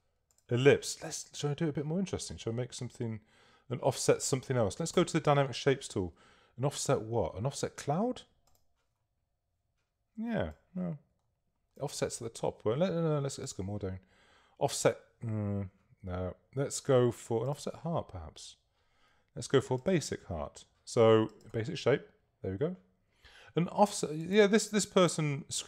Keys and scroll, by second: 5.0 s, 23.3 Escape.